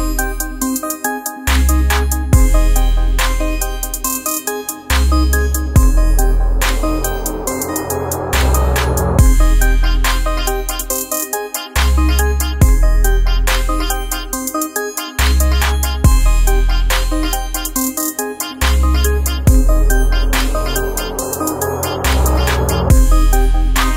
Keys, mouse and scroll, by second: 1.3 alt+scroll down 1, 1.6 space, 1.7 click, 2.2 space, 2.7 alt+scroll down 1, 3.0 space, 3.2 click, 3.5 space, 4.0-5.7 drag, 6.0 alt+scroll down 1, 6.4 space, 6.5 click, 6.9 space, 7.4-10.6 ctrl+drag, 12.2-17.3 shift+drag, 17.3-19.9 drag, 22.7 ctrl+z.